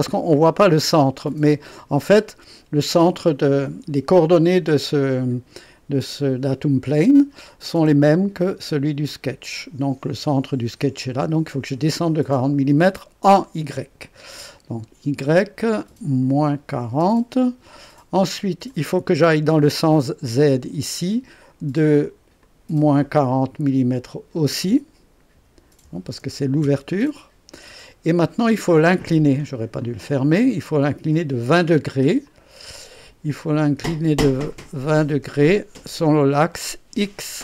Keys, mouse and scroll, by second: 15.2 click, 16.3 KP_Subtract, 16.7 KP_4, 17.0 KP_0, 18.6 click, 22.4 click, 25.3 KP_Subtract, 25.8 KP_4, 26.2 KP_0, 26.6 KP_Enter, 29.8 click, 32.2 click.